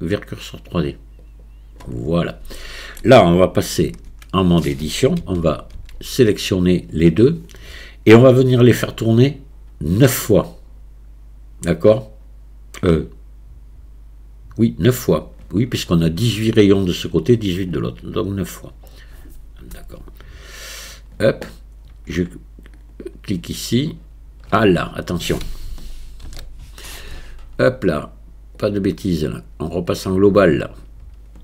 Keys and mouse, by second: 2.6 shift+click, 3.9 Tab, 5.2 a, 5.8 a, 20.2 click, 22.8 click, 26.3 ctrl+z, 28.7-30.4 drag.